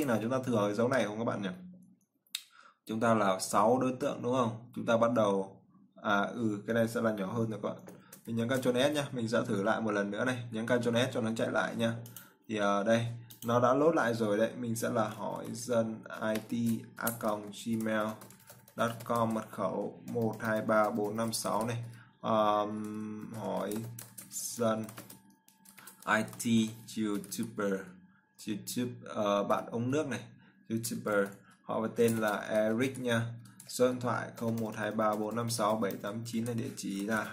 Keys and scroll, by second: 8.8 ctrl+s.